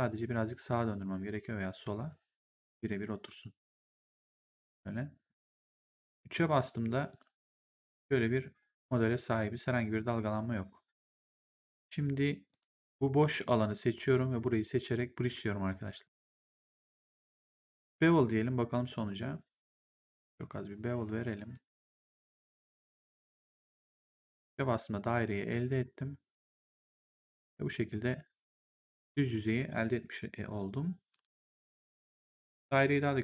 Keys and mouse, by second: 0.6 click, 5.3 right click, 5.8 3, 7.0 click, 9.9 click, 10.3 1, 11.9 right click, 12.4 click, 13.2 w, 14.0 shift+click, 15.8 click, 18.9 click, 20.1 click, 21.7 click, 23.0 click, 23.7 3, 24.1 right click, 24.5 click, 31.0 ctrl+1, 32.5 click.